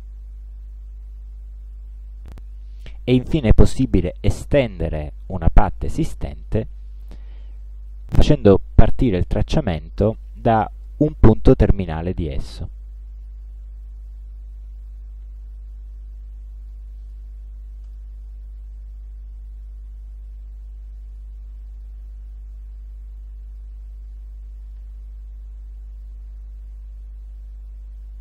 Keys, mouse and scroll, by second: 7.2 click, 12.5 click, 13.3 click, 14.1 click, 14.9 click, 15.8-16.4 drag, 16.8 click, 17.9 right click, 21.2 space, 21.7 click, 23.2 click, 24.3 click, 25.7 click, 27.4-28.2 shift+drag.